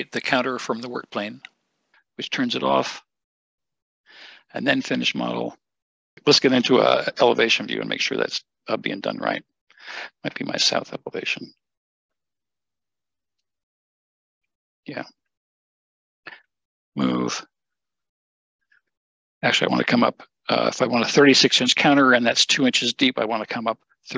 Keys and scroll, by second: 6.7 Escape, 6.7 `, 6.9 Escape, 16.7 m, 21.2 typing.